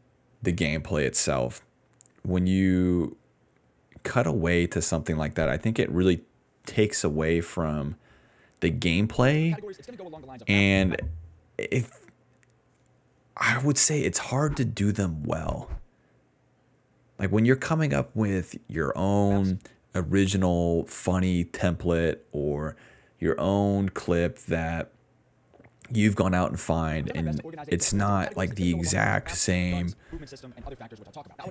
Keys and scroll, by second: 5.3 space, 5.6 space, 7.2-11.0 typing, 13.9-15.8 typing, 17.0 d, 17.5 d, 19.2 space, 19.7 space, 21.5 s, 25.7-27.9 typing, 29.5 s, 30.2 d, 31.4 s.